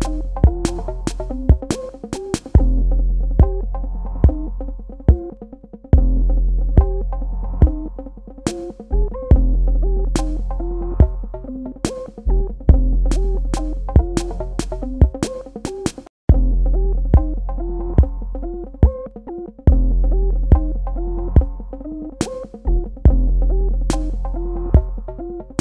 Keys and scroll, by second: 13.9 ctrl+Num_Lock, 14.6 space.